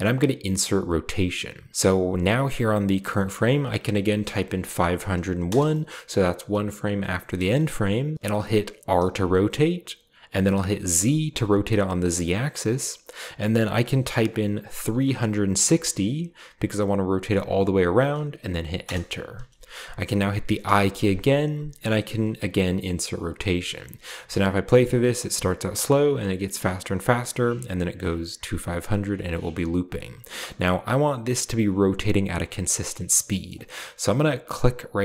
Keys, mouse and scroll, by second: 0.7 click, 3.2 click, 4.0-4.5 typing, 5.4 Return, 8.9 r, 11.0 z, 14.8-15.6 typing, 18.8 Return, 20.6 i, 23.1 click, 24.0 space, 25.7-26.1 drag, 26.9-27.3 drag, 27.7 drag, 30.2 space, 32.5-34.1 scroll down 2, 33.4-33.8 middle drag.